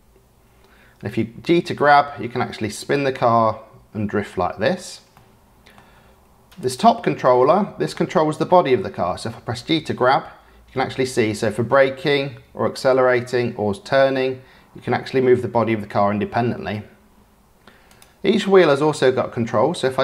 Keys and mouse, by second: 5.1-5.7 drag, 6.5 click, 7.3-7.9 drag, 9.7 g, 18.4 click.